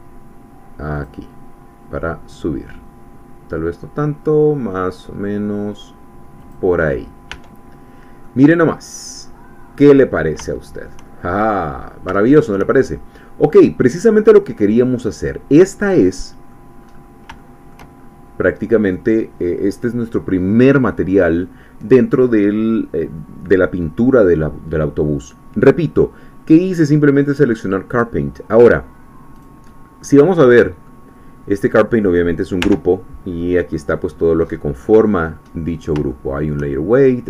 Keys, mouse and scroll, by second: 1.1 click, 6.4 click, 6.9-7.3 scroll down 1, 7.3 Tab, 7.8 scroll down 1, 8.2-10.4 middle drag, 10.5 shift+middle click, 11.7-12.1 shift+scroll up 1, 12.2 shift+middle click, 13.1-13.7 scroll down 2, 14.0-16.8 middle drag, 16.8-17.2 scroll up 1, 17.4 shift+middle click, 18.0-18.3 shift+scroll up 2, 18.3 middle click, 18.4 scroll down 2, 29.4 click, 30.0-31.1 middle drag, 31.5 click, 31.9-32.6 scroll down 2, 32.6 Tab, 33.0-34.4 scroll down 3, 34.4-36.0 scroll up 4, 36.0 shift+middle click, 36.1 shift+click.